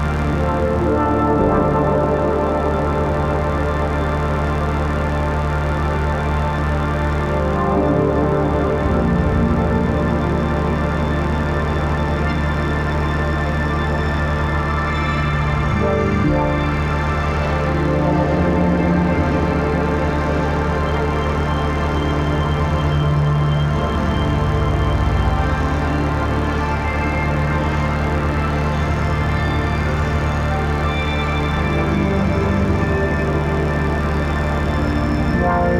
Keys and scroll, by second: 3.5 ctrl+s, 16.1 ctrl+z, 16.9 ctrl+z, 17.0 ctrl+z.